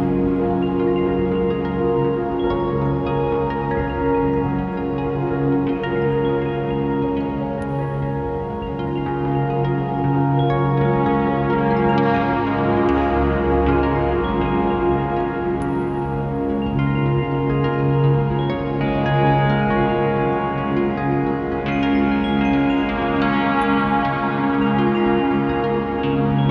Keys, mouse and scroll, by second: 0.3 right click, 0.4 KP_Decimal, 1.2 r, 1.7 scroll down 1, 2.4-2.7 scroll down 1, 3.5 ctrl+alt+KP_0, 3.7 scroll down 1, 3.9-4.3 scroll up 1, 4.3 click, 4.7-7.1 typing, 5.1 click, 5.7 click, 6.1 click, 7.6-8.0 scroll down 1, 8.0 click, 15.1 a, 15.5 click, 18.8 alt+a, 19.2 s, 19.3 click, 25.0 click.